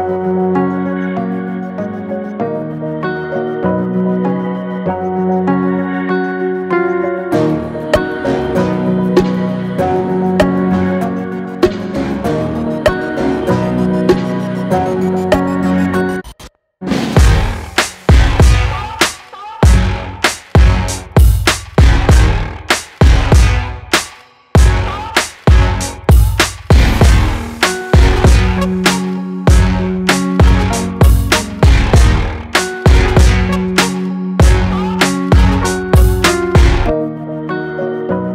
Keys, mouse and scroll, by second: 7.3-10.6 drag, 11.8 click, 15.3-18.6 drag, 21.1 click, 25.6 click, 29.9 click, 32.7 right click, 32.8 right click, 34.1 click, 36.5-38.3 alt+shift+drag.